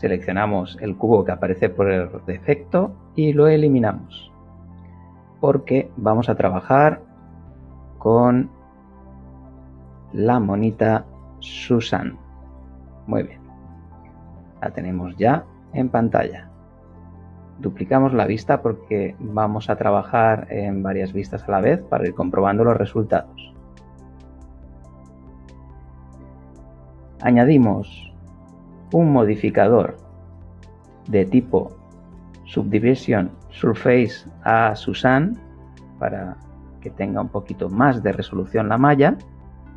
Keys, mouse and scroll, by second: 2.5 x, 3.2 click, 5.4 shift+a, 12.1 click, 13.2 middle click, 13.6-15.2 middle drag, 17.5-19.5 drag, 29.3 click, 30.6 click, 34.8 click, 36.2 middle click.